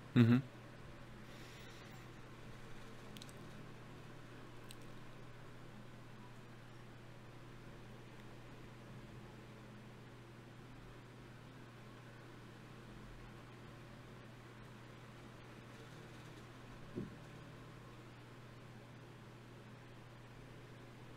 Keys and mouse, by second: 0.3 click, 3.1 ctrl+z, 3.9 ctrl+z, 4.7 ctrl+z, 6.1 ctrl+z, 6.9 ctrl+z, 9.1 shift+q, 12.5 F6, 14.1-21.1 drag.